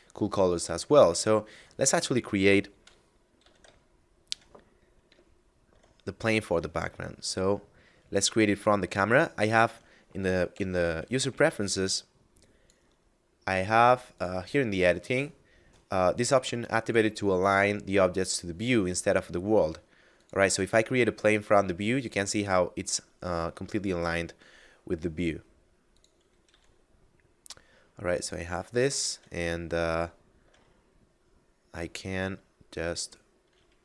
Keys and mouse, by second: 0.6 middle click, 2.7 KP_Divide, 3.4 a, 3.9 shift+middle click, 4.8 KP_0, 6.1 shift+a, 8.2 click, 10.3 ctrl+alt+u, 11.8 click, 14.1 click, 16.8 click, 22.2 s, 25.9 click, 26.4 s, 28.1 click, 29.8 shift+middle click.